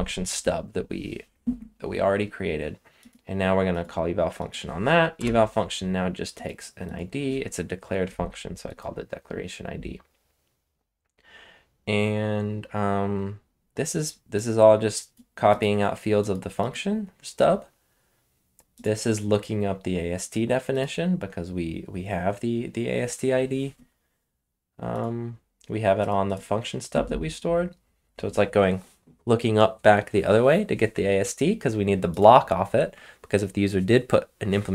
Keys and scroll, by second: 5.1 Return.